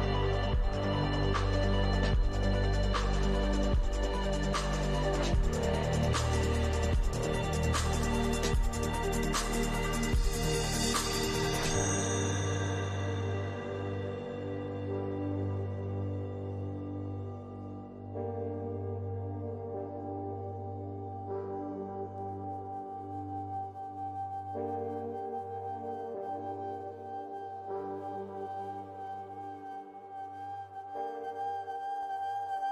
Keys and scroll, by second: 3.7 Return, 9.6 ctrl+-.